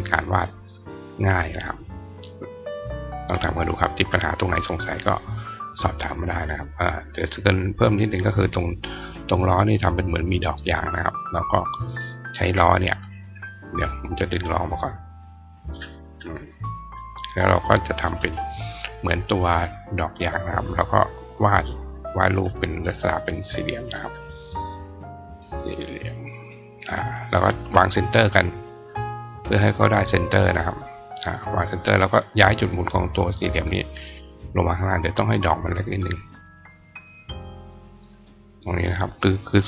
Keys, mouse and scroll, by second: 10.5 click, 11.4 click, 14.0 click, 15.1 click, 15.4 right click, 15.9 click, 16.7 click, 17.4 click, 19.7 click, 20.6-22.2 drag, 22.7 click, 23.6 click, 23.8 click, 24.5-26.4 drag, 27.4 shift+click, 28.5 click, 29.8 click, 30.4 click, 31.3 click, 31.7 click, 32.5 click, 34.4 click, 36.3-37.8 drag, 39.0-39.6 drag.